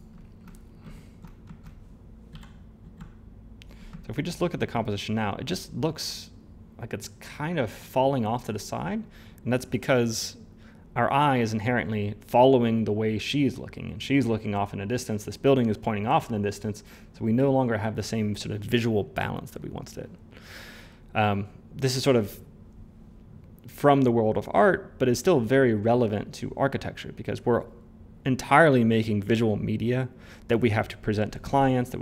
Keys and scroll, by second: 2.2 f, 2.8 f.